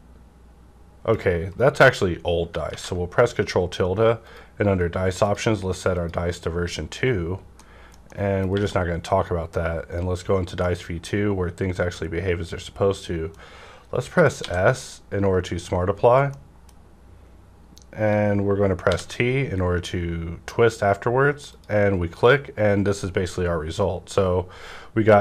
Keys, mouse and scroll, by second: 1.5 right click, 2.7 ctrl+`, 4.2 click, 4.2 click, 5.2 click, 7.6 middle click, 8.1 middle click, 8.1 click, 8.5 q, 9.5-14.4 drag, 10.6-15.4 middle drag, 14.4 s, 15.4 scroll up 1, 16.3 middle click, 16.3 scroll up 1, 17.2-17.8 scroll down 1, 17.8-18.8 scroll down 1, 18.9 t, 21.5 click, 21.5 t, 23.8 scroll down 1.